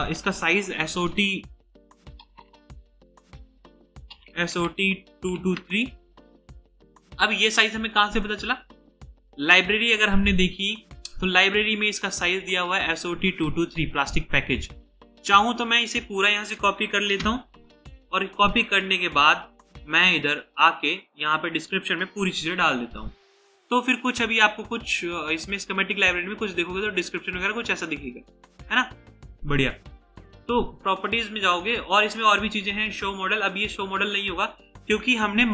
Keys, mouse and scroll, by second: 0.0-0.9 typing, 2.3-2.8 typing, 2.3 Return, 3.9-6.1 typing, 17.6-19.5 typing, 21.3 double click, 22.4 typing.